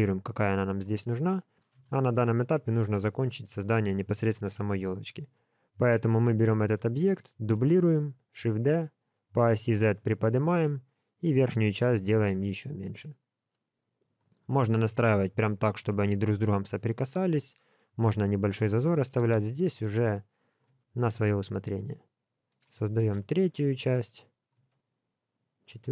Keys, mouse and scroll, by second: 1.7 KP_1, 2.4 scroll down 1, 4.8 scroll down 2, 4.8 g, 7.3 shift+d, 17.5 shift+middle click, 19.2 shift+d, 20.7 s, 23.0 shift+d, 24.5 s.